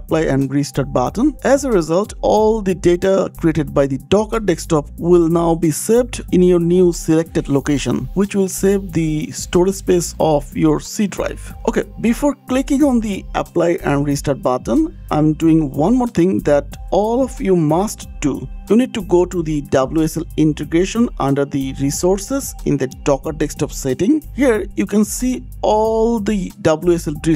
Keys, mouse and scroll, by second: 3.0 click, 11.4 click, 13.6 click, 16.1 click, 19.0 click, 22.6 click, 22.7 click, 23.4 click.